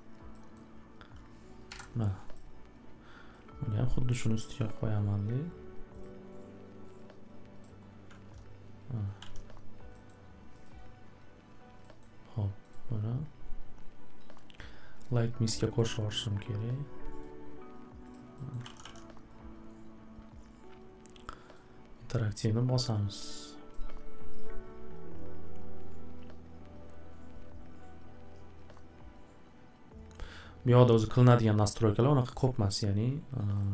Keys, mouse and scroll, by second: 0.5 scroll, 1.7 Delete, 2.3 click, 3.9 click, 4.2 middle click, 5.0 scroll, 6.0 click, 7.6 click, 8.3 alt+w, 8.3 scroll, 9.2 alt+w, 10.1 scroll, 10.6 click, 11.5-12.0 scroll up 2, 12.7 click, 15.0 click, 15.8 click, 16.1 click, 17.2 click, 18.1 click, 18.5 scroll, 18.6 alt+w, 18.8 alt+w, 21.5 click, 23.7 click, 33.6 click.